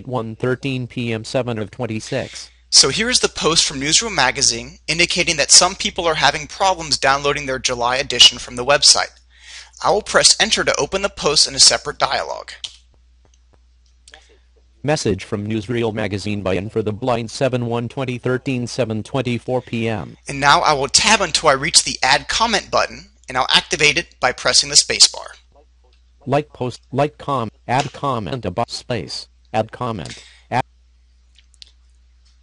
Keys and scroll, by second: 11.1 Return, 24.1 Tab, 26.7 space.